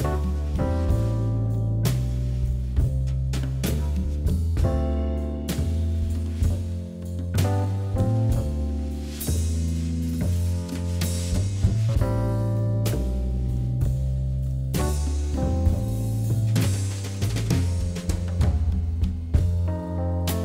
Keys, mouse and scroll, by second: 0.0 i, 1.0 click, 1.6 i, 3.3 Tab, 3.9 ctrl+a, 4.4 Tab, 4.9 i, 5.6-7.0 middle drag, 7.0 e, 8.8 KP_1, 9.5-11.0 shift+middle drag, 12.3 shift+d, 13.0 s, 16.2 middle click, 17.1 e, 18.4 KP_1, 19.3 shift+d, 20.0 r.